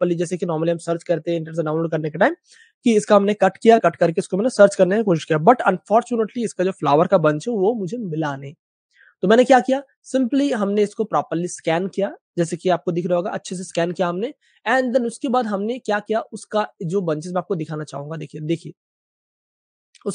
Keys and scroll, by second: 2.3 super+space, 2.4 super+space, 3.0 super+space, 3.2 super+space, 5.7 super+space, 5.8 super+space, 6.3 space, 6.4 space, 6.5 space, 7.4 super+space, 8.1 typing, 11.3 super+space, 11.4 super+space, 12.7 space, 12.8 space, 12.9 space.